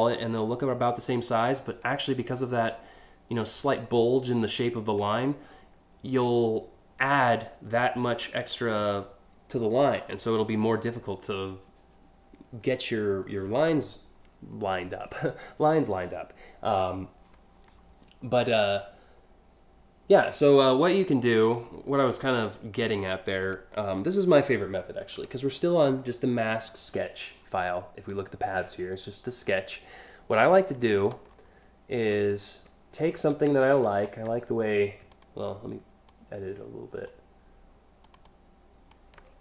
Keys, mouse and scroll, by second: 14.3 ctrl+click, 20.5 click, 21.1 ctrl+click, 22.5 click, 23.0 click, 27.7 click, 30.6-31.0 alt+scroll up 4, 31.7 alt+scroll down 1, 32.7 alt+scroll up 2, 33.3-33.8 ctrl+scroll up 2, 34.7 ctrl+click, 35.7 ctrl+click, 37.7 ctrl+click, 37.9 ctrl+click, 39.1 alt+scroll up 4.